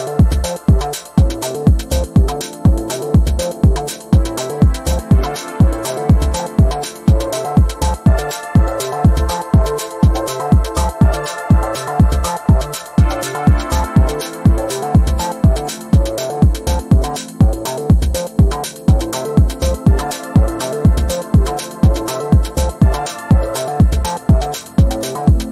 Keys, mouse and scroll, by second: 2.1-2.5 ctrl+scroll down 1, 2.9-3.3 ctrl+scroll down 1, 4.1-4.5 ctrl+scroll down 1, 5.5-6.2 ctrl+scroll up 1, 7.5 click, 8.0-8.5 ctrl+scroll down 1, 9.4 ctrl+scroll up 1, 10.1 click, 10.8-11.5 ctrl+scroll up 1, 11.5 click, 13.7-14.8 typing, 15.8 click, 17.7-18.8 typing, 19.7 click, 21.4 ctrl+d, 22.4 shift+click, 23.0 right click.